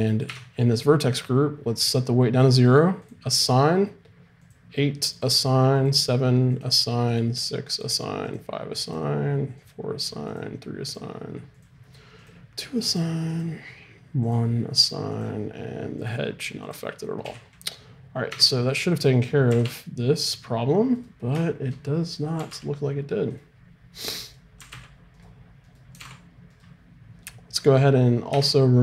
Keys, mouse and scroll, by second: 0.3 Tab, 3.1-18.5 drag, 17.2 a, 18.3 Tab, 19.5 r, 22.1-27.9 drag, 22.4 r, 24.6 right click, 26.0 right click, 28.3 Tab.